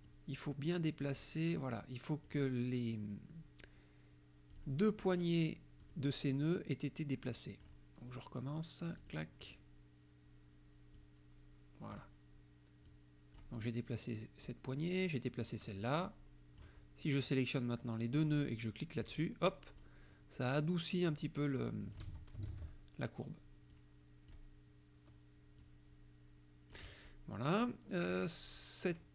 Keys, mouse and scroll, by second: 0.0 click, 1.2-2.5 drag, 4.5 click, 5.9 click, 7.3 click, 9.0 click, 11.0 click, 12.9 click, 14.5-16.9 drag, 17.3 click, 19.1 click, 21.2 click, 22.1 ctrl+z, 23.8 click, 25.7-26.9 drag, 28.2 click.